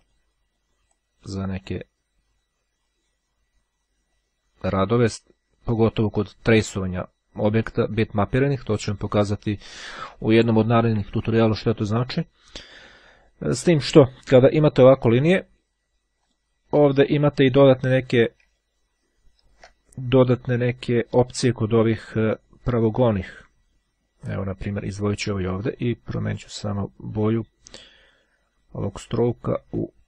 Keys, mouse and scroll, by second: 0.1-1.2 drag, 2.1-3.7 drag, 4.2-5.3 drag, 16.4 click, 18.7-19.5 ctrl+scroll up 2, 19.5 ctrl+scroll up 1, 22.6 click, 23.1-26.3 drag, 29.5-30.0 right drag.